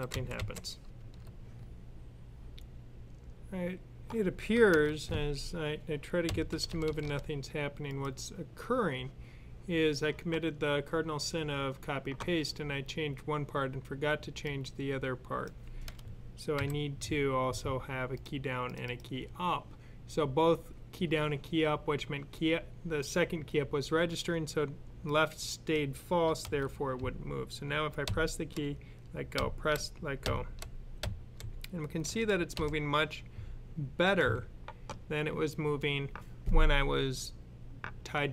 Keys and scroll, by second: 0.0-0.2 typing, 6.2 Left, 6.4-6.9 typing, 27.9 Left, 29.2-30.9 typing, 31.9 typing, 32.4 Left.